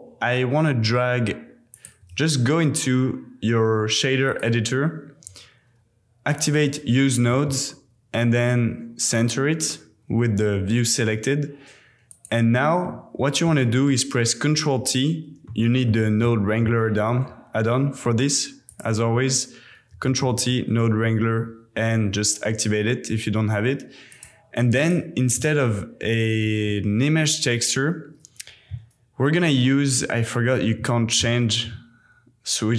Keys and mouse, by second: 1.7-4.4 drag, 6.3 click, 7.3 a, 7.6 KP_Decimal, 12.8 click, 14.4 ctrl+t, 15.5-16.9 drag, 17.0 super+,, 24.7 click, 26.0 shift+s, 31.1 shift+s.